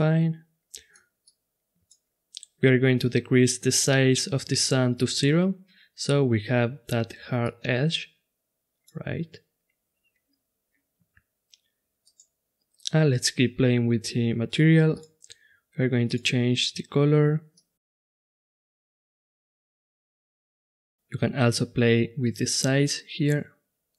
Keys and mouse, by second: 5.6 middle click, 5.9-6.7 middle drag, 7.4-9.1 middle drag, 9.1 click, 9.3 middle click, 9.4 middle click, 12.1-13.9 right drag, 14.9-17.8 drag, 19.0-19.4 right drag, 19.4 click, 20.9-22.4 drag.